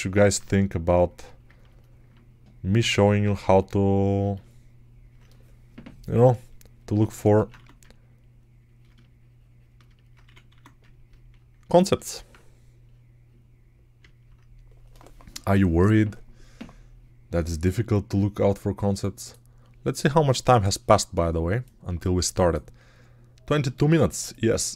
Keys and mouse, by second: 3.1 alt+right click, 7.4 1, 10.1 1, 10.4 1.